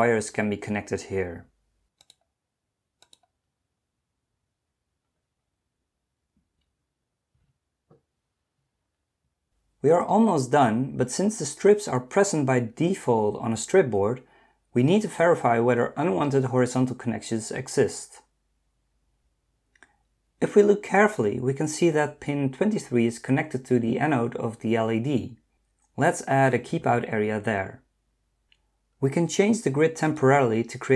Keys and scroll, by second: 6.4 Escape.